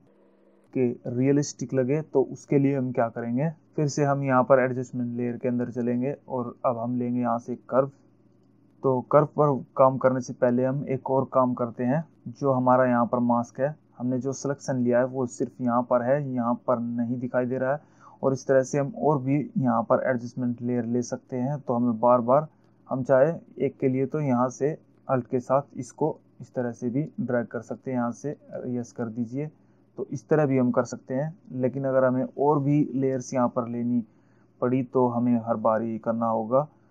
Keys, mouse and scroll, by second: 6.2 click, 25.5 alt+click, 29.2 click.